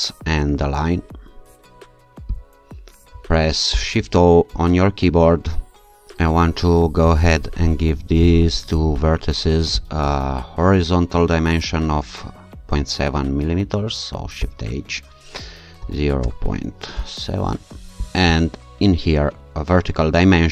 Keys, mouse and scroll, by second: 2.4 shift+click, 3.7 shift+o, 6.0-7.4 scroll up 2, 8.3 click, 9.8 click, 14.4 shift+h, 15.8 0, 16.2 ,, 16.9 7, 17.6 Return, 18.0 shift+click.